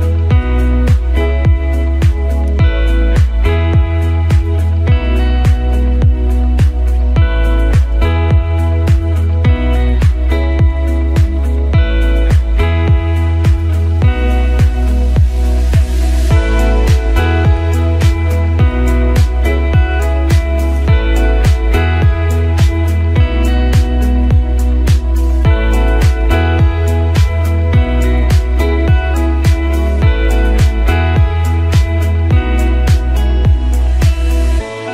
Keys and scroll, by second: 2.4 b, 9.9 ctrl+alt+i, 17.7 ctrl+d.